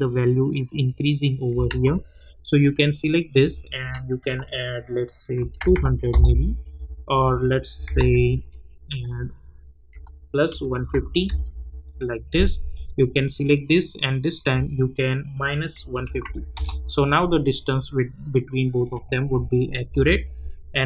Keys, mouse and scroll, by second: 1.9 ctrl+z, 2.2 click, 6.1 Return, 7.9 ctrl+z, 8.3 click, 11.2 Return, 12.7 click, 16.5 Return, 19.9 j.